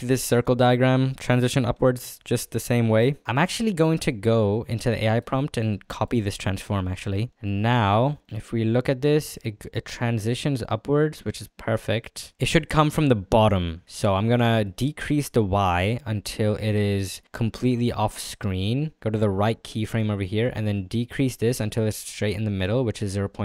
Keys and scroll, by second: 6.8 ctrl+c.